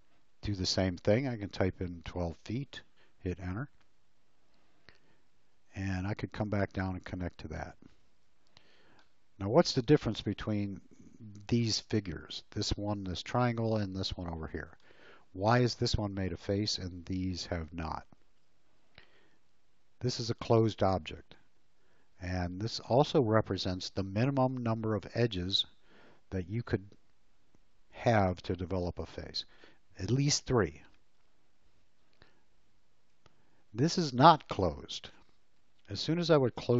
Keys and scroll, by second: 2.2 1, 3.2 Return, 8.0 space, 33.1 l.